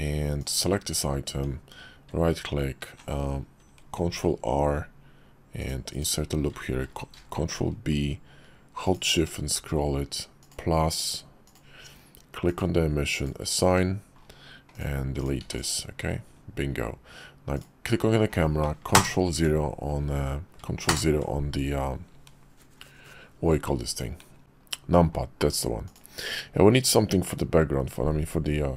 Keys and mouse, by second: 0.4 click, 1.3 Tab, 4.1 ctrl+r, 6.9 ctrl+b, 11.4-12.6 drag, 13.6 Tab, 15.2 click, 15.4 x, 17.6 click, 18.9 ctrl+KP_0, 20.9 ctrl+KP_0, 25.8 click.